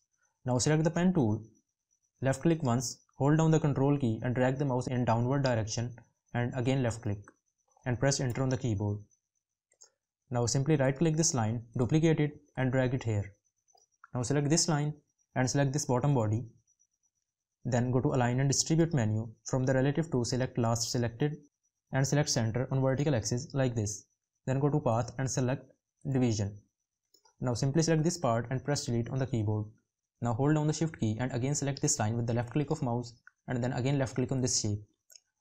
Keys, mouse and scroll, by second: 30.5 shift+click.